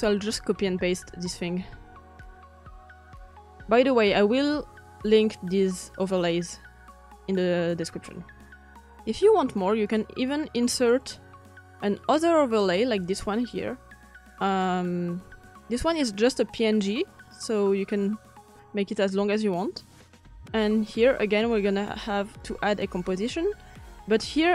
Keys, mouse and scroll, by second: 0.0 ctrl+v, 0.0-2.2 drag, 9.0 v.